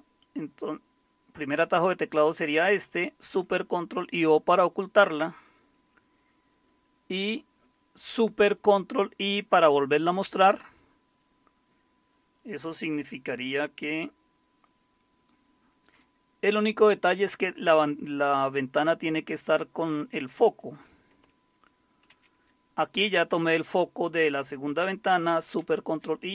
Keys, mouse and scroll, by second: 22.1 super+c, 25.6 ctrl+super+i.